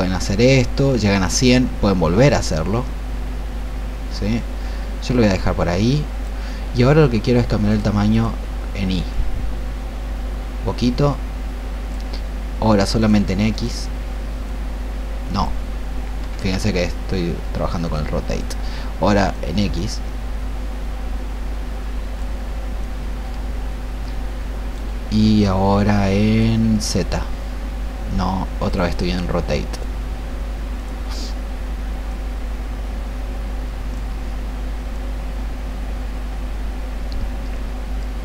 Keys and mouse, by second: 16.3 ctrl+z, 17.7-24.9 drag, 26.2-38.2 drag.